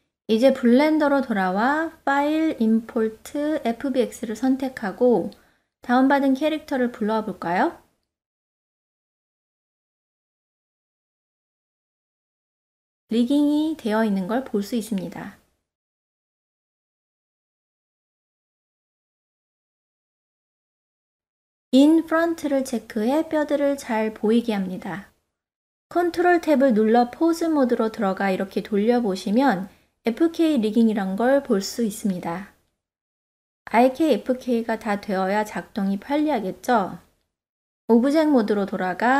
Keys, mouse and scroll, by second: 3.7-6.4 drag, 12.0-13.0 ctrl+middle drag, 13.2-13.8 middle drag, 13.9-14.2 shift+middle drag, 15.1 click, 16.8 click, 20.6 click, 21.8 click, 22.5-23.0 middle drag, 23.3 ctrl+middle click, 25.6 ctrl+Tab, 26.3-26.8 middle drag, 26.9 ctrl+middle click, 27.3-27.7 shift+middle drag, 28.4 click, 29.0-29.7 middle drag, 29.8 r, 30.3 click, 31.4 ctrl+z, 31.7 click, 32.3 click, 34.2 ctrl+z, 34.8-35.8 middle drag, 36.3 ctrl+Tab, 37.4 click, 39.0 n.